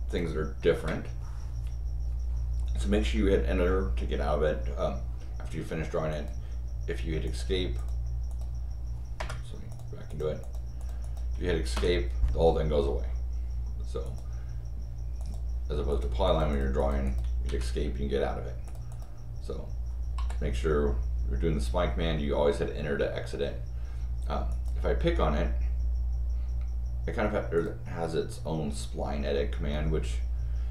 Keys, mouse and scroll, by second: 0.1 click, 0.7 Return, 6.1 click, 7.2 click, 7.7 click, 8.3 click, 9.2 Return, 9.7 click, 10.1 click, 10.4 click, 10.8 click, 11.0 click, 11.7 Escape, 14.0 click, 15.2 click, 15.9 click, 16.2 click, 16.5 click, 16.8 click, 17.0 click, 17.4 Escape, 18.6 click, 18.9 click, 24.5 click, 27.5 click.